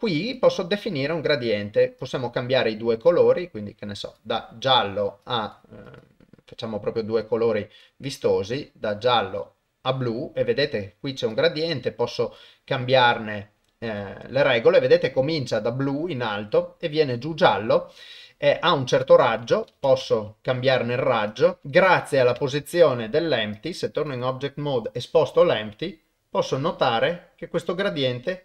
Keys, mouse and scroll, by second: 0.4 click, 5.2 click, 5.9 click, 11.3-12.4 drag, 13.1-14.0 drag, 18.7-20.1 drag, 21.4 click, 22.6 ctrl+Tab, 24.1 click, 25.4 g.